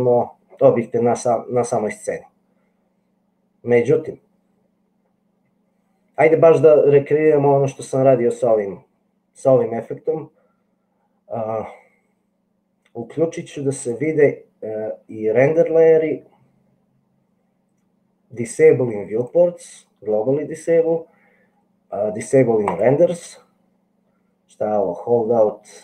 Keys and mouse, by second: 14.0-25.8 drag.